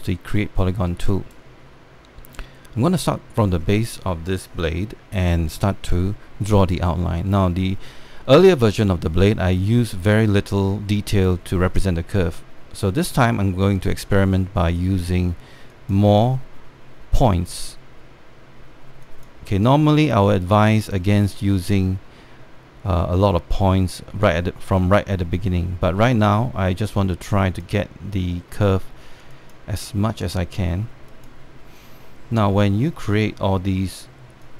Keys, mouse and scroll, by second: 15.4-21.4 drag, 25.5-34.5 drag.